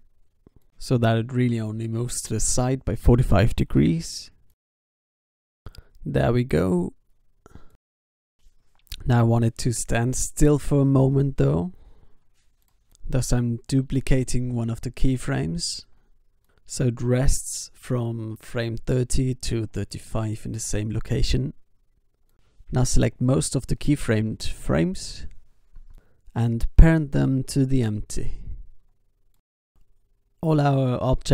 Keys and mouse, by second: 5.9 i, 6.4 alt+a, 10.0 alt+a, 10.3 ctrl+s, 12.6 shift+d, 14.0 g, 15.5 alt+a, 18.0 alt+a, 18.2 ctrl+s, 19.2 ctrl+s, 20.7 b, 22.9-25.6 drag, 24.1 ctrl+p, 26.3 click, 27.0 s, 29.6-30.8 drag.